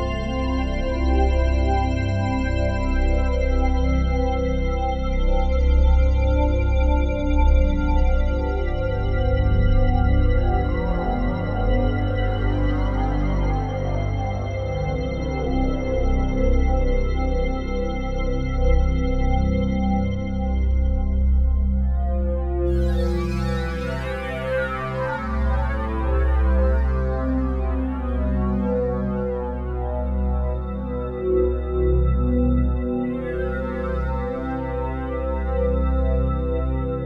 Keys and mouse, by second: 1.5 space, 4.6-15.9 drag, 16.1 space, 17.1-27.8 drag, 28.9 click, 31.4 click, 33.6 click, 34.8 click, 36.1 click.